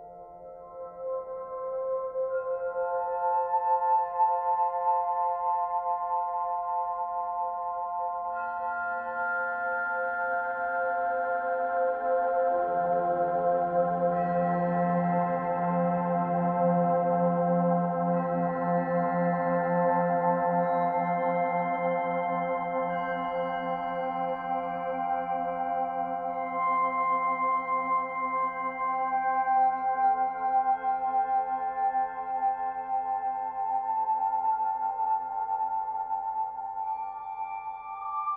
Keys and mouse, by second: 1.0 click, 3.1 click, 3.6 click, 4.3 click, 5.0 click, 5.7-10.6 drag, 12.0 click, 15.6 click, 16.8 click, 17.3 click, 20.3 click, 23.5 click, 25.6 click, 28.1-30.0 typing, 31.0 click, 32.6 click, 34.5 click, 35.5 click, 36.9 click, 37.1-38.3 drag.